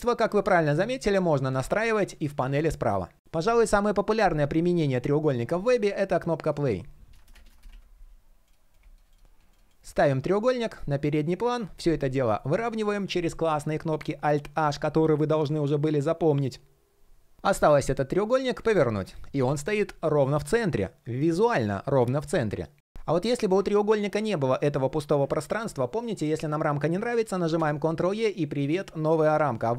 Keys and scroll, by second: 11.8 alt+p, 12.2 alt+m, 27.2 super+e, 29.5 alt+h.